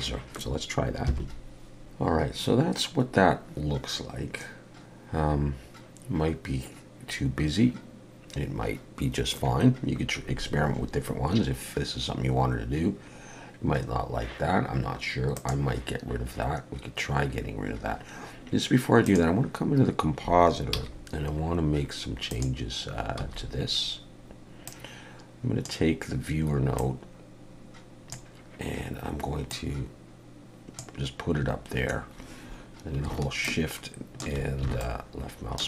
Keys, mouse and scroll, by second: 1.4 F12.